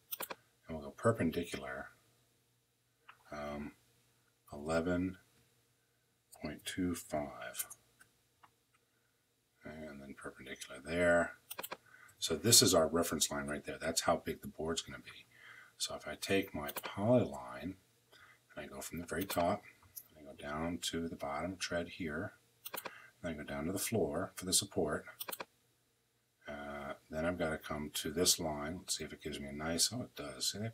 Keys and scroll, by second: 4.2 l, 6.3 2, 6.8 5, 7.3 Return, 11.8 Escape.